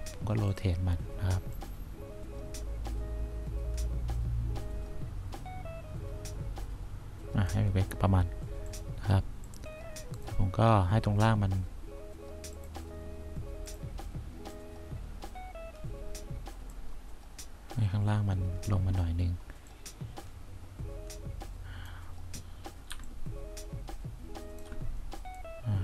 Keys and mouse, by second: 1.6-3.4 drag, 15.2-16.7 drag, 19.8-21.8 drag, 23.0 1, 25.6 click.